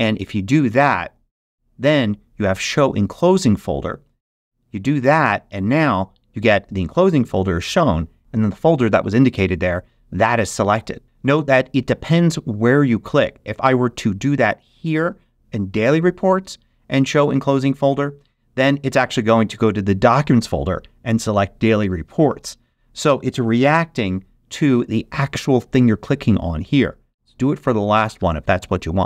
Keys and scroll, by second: 23.6 shift+super+g.